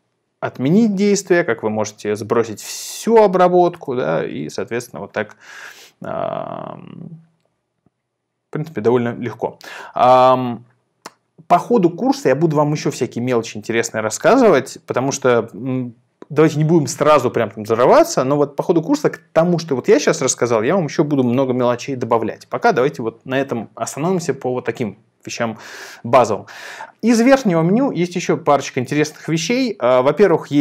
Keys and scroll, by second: 3.8 super+r.